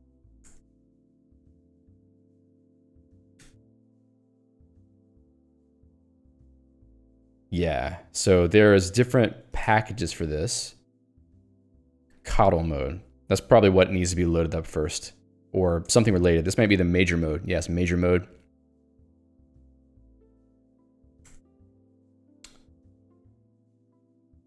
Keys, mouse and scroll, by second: 0.0 ctrl+alt+j, 0.2 a, 0.5 Return, 0.9 super+e, 2.3 ctrl+s, 2.9-4.3 typing, 4.7 ctrl+g, 6.0 j, 6.5 l, 7.1 j, 9.7 shift+g, 10.4 ctrl+u, 11.6 j, 15.9 Return, 18.6 ctrl+d, 21.3 Return, 23.9 ctrl+alt+j, 24.2 ctrl+g.